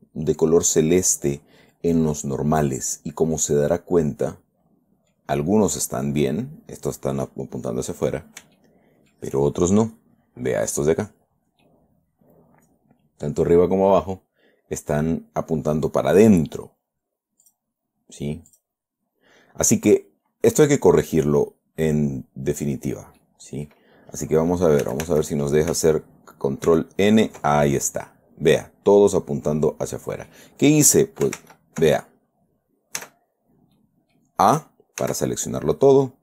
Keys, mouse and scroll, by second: 2.4 scroll down 1, 3.7-5.7 drag, 9.0 shift+click, 12.0-15.4 drag, 17.8 click, 18.9 click, 19.5 scroll up 1, 20.0 scroll down 1, 23.6 middle click, 25.2 a, 27.1 ctrl+n, 28.9 scroll down 1, 29.4-30.8 middle drag, 31.8 ctrl+z, 32.4 ctrl+scroll up 2, 33.4 a, 33.7-34.0 scroll down 2, 34.1 middle click, 35.4 a.